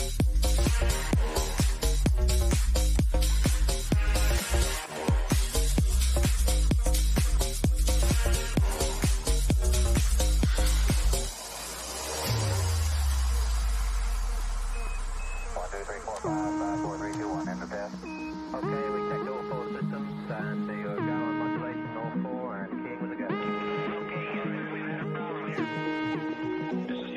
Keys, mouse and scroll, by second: 1.3 click, 4.3 shift+', 5.1 Return, 9.8 click, 15.4 click, 21.1 space, 23.9 shift+8, 24.9 Return.